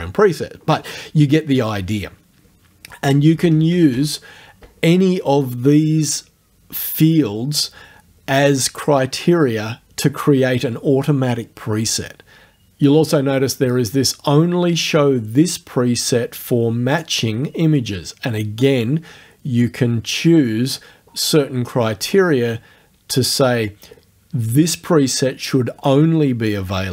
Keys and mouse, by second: 3.1 BackSpace, 16.9 click.